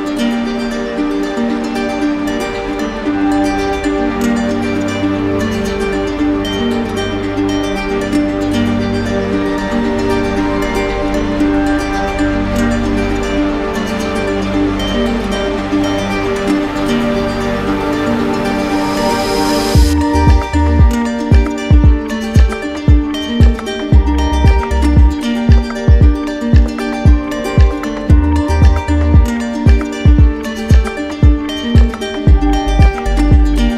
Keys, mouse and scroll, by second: 3.7 click, 4.8 click, 5.7 ctrl+shift+a, 5.7 click, 6.8-7.5 scroll, 8.1-8.5 scroll, 9.8 middle click, 10.7 middle click, 10.8 click, 12.4 click, 12.8 shift+click, 13.6 shift+click, 14.4 alt+click, 24.9 click, 26.9 alt+click, 28.3 alt+click, 29.8 alt+click.